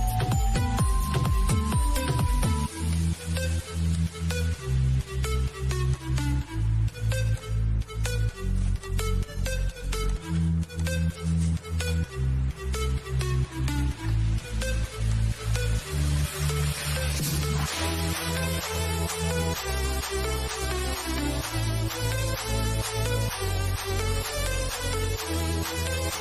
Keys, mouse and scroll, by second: 5.2 click, 14.3 click, 15.2 typing, 18.9 l, 20.3 click.